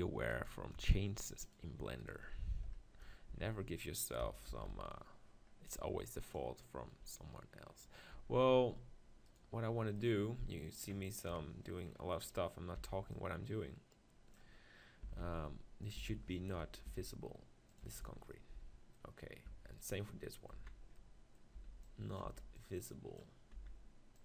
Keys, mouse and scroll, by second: 0.3-2.0 drag, 2.0-3.3 right drag, 3.3 z, 4.5 ctrl+l, 6.2-8.1 drag, 8.2 Tab, 8.5 Tab, 9.3 right click, 10.0-11.3 middle drag, 11.3 KP_7, 11.9-14.5 drag, 14.5 b, 14.9-18.3 drag, 15.0 s, 16.0 s, 17.9 Tab, 18.3 z, 19.5 Tab, 20.6 z, 21.7 b, 22.3 b, 23.6 z.